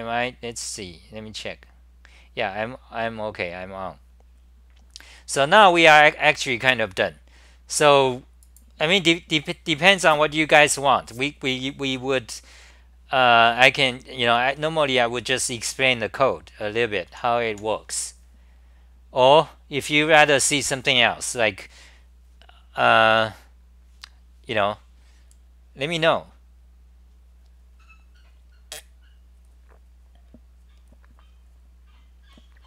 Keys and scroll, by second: 13.5-15.4 typing, 17.1 h, 17.5 h.